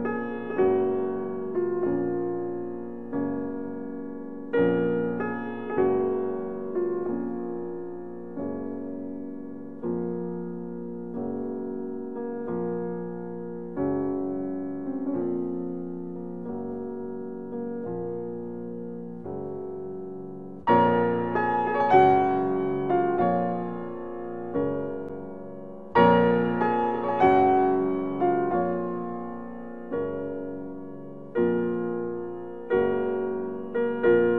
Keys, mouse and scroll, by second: 1.6-2.3 typing, 8.5 click, 10.2-18.6 middle drag, 27.5-28.0 scroll down 1, 28.9 middle click, 30.5 click, 32.0 ctrl+r, 34.0 2.